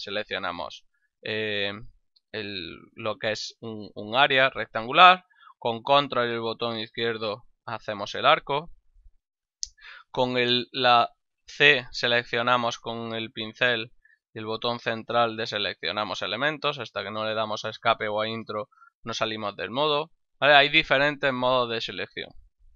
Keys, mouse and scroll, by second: 6.3 ctrl+click, 10.4 c, 11.5 click, 13.5 middle click, 18.3 Escape.